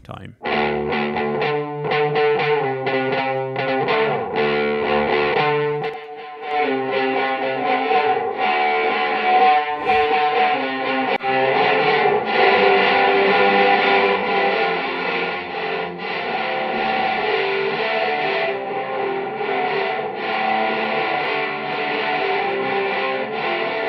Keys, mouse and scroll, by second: 0.0 space, 1.9-3.5 drag, 4.9 click, 5.7 click, 6.4-7.4 drag, 7.7 click, 11.1 click, 14.0-15.1 drag, 16.2-17.5 drag, 17.9-20.0 drag, 20.2-21.9 drag, 22.2 click.